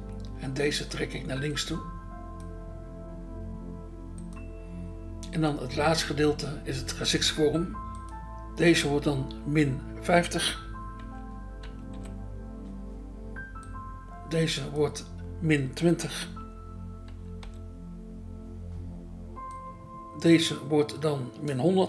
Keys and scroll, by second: 11.6 5, 11.9 0, 17.1 2, 17.4 0.